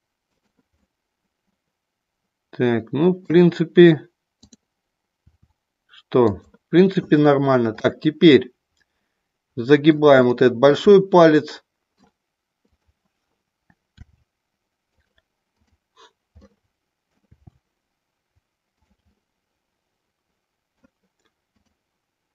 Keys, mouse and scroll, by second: 0.7-3.3 middle drag, 5.2 r, 6.2 click, 7.8-9.9 middle drag, 10.2 shift+middle click, 10.8-11.9 middle drag, 12.7 click, 13.9 r, 14.9 click, 15.5 click, 16.3 middle click, 17.2 r, 18.7 click, 19.2-20.7 middle drag, 21.6 click.